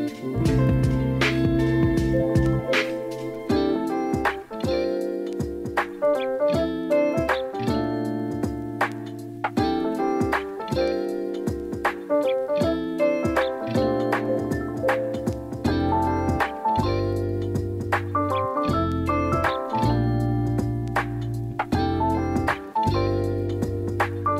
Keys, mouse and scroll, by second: 0.2 s, 0.6 y, 1.0 KP_0, 1.4 click, 2.2 r, 3.4-6.5 drag, 6.9 KP_7, 7.7 shift+middle click, 8.6 click, 9.8 shift+middle click, 13.8 click, 14.3-17.0 drag, 17.2 middle click, 18.1 middle click, 18.9 KP_3, 19.8 shift+middle click, 20.4 click, 23.1 shift+middle click, 24.2 click.